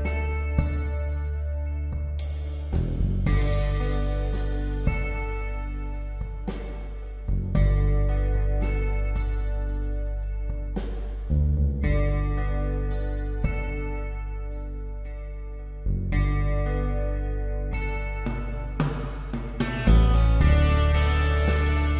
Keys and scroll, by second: 1.0 space, 1.7 ctrl+alt+z, 2.3 space, 5.6 space, 6.8 space, 7.5 space, 8.3 ctrl+z, 9.5 space, 10.8 space, 11.4 space, 12.4 space, 13.6-14.6 typing, 15.6-18.0 typing, 17.3 ctrl+alt+z, 19.1 space.